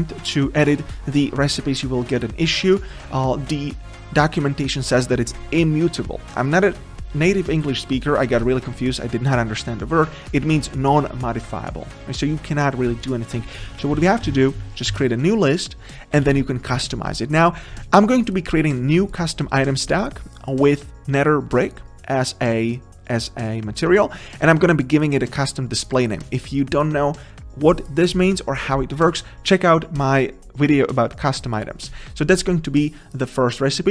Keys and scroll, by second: 2.3 ctrl+b, 13.6 ctrl+z.